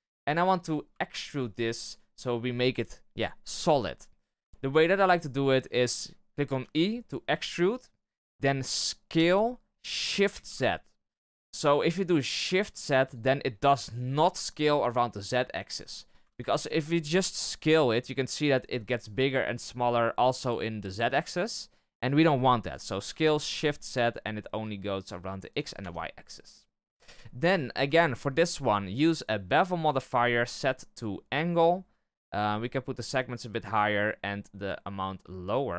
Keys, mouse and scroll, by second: 0.4 scroll up 1, 0.5 a, 1.0-4.0 shift+middle drag, 4.0-4.5 scroll up 1, 4.5-6.5 shift+middle drag, 6.5 e, 16.2 ctrl+z, 17.1 s, 22.9 s, 25.7 Tab, 26.2-27.2 middle drag, 27.2-27.6 scroll up 1, 27.6 shift+middle click, 28.3-35.7 drag.